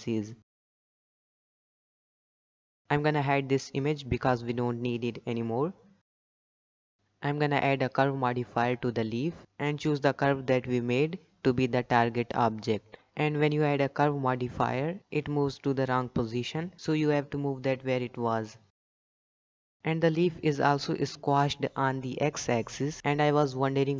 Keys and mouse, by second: 0.8 g, 1.6 shift+middle click, 1.9 g, 1.9 z, 2.0 Tab, 2.8 click, 4.4 click, 8.1-9.1 drag, 13.1-13.6 shift+middle drag, 18.0 g, 19.9 shift+middle click, 20.1 shift+middle click, 20.3 g, 23.3 click.